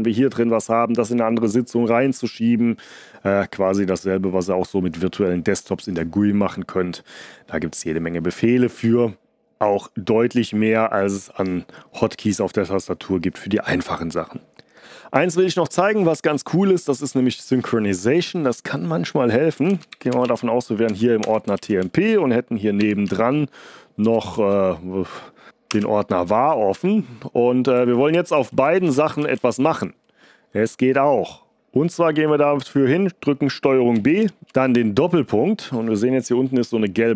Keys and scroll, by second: 19.2-20.7 typing, 20.8 Tab, 21.2 Return, 21.5 ctrl+b, 22.5-25.4 typing, 25.6 Return, 28.1 ctrl+b, 28.3 Left, 28.7 ctrl+b, 29.1 Right, 29.1 s, 33.9 ctrl+b, 34.3 :.